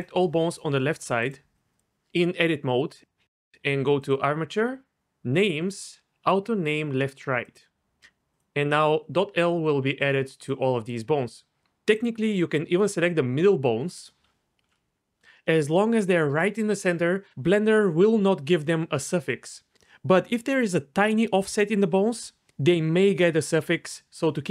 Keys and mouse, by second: 1.3-2.6 shift+drag, 2.7 middle click, 4.0-8.4 drag, 10.4 click, 10.9 click.